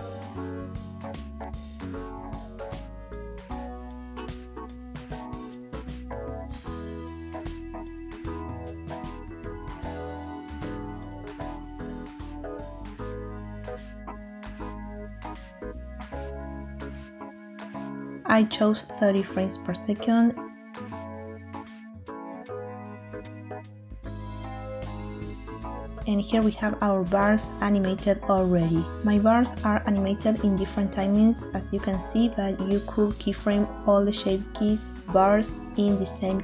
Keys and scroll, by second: 2.2 Tab, 6.1 Tab, 7.2 typing, 11.1 Tab, 14.0 Tab, 15.0 i, 17.1 i, 23.8 typing, 24.3 Return, 25.7-26.7 typing, 30.0 space.